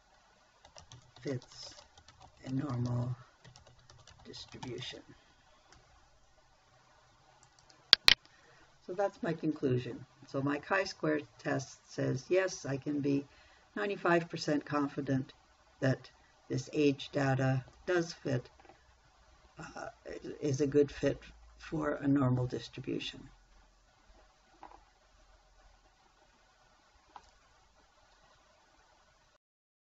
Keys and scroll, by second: 1.1-5.3 typing, 6.4 n.